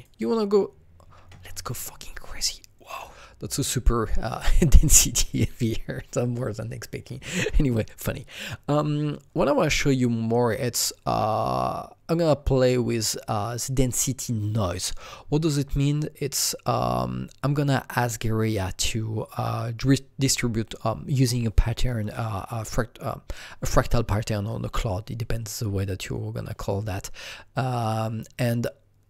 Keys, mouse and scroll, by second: 0.0 double click, 1.1 KP_1, 1.3 KP_0, 1.8 KP_Enter, 1.8 KP_1, 4.2 click, 4.3 KP_Enter, 4.3 click, 4.3 KP_0, 16.6 KP_Enter, 16.6-20.2 drag, 27.7-29.0 drag.